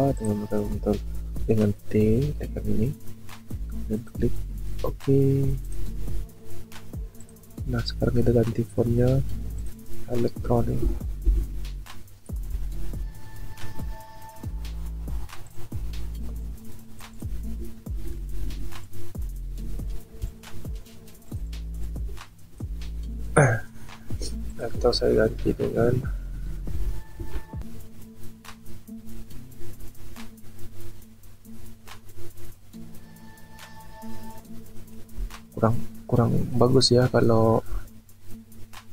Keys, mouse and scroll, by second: 10.8 e, 17.9 ctrl+t, 18.8 shift+click, 20.3 shift+click.